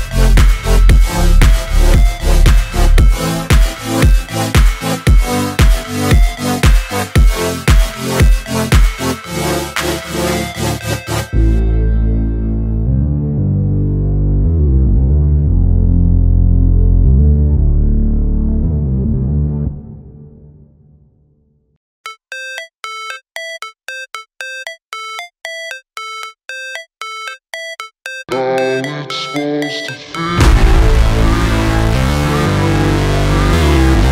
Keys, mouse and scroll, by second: 2.7 scroll down 1, 4.2 shift+click, 4.8 click, 5.0 scroll up 1, 5.6-15.9 drag, 15.9-16.5 scroll up 1, 16.6 scroll down 1, 17.6-21.2 drag, 21.4-26.8 drag, 27.2 v, 27.5 click, 28.8-30.0 scroll up 1, 30.0 click, 31.2-31.6 scroll down 1, 32.3 click, 33.7 p, 34.0-34.1 scroll down 1.